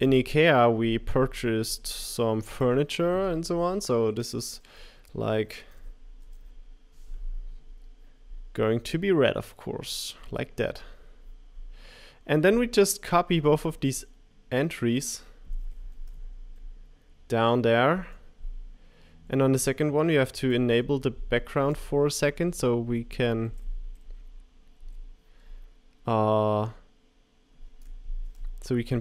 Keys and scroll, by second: 6.0-6.7 typing, 16.0 super+c, 17.1 super+v, 17.1 Page_Down, 22.8 Up, 23.5 Up, 24.8 Page_Down.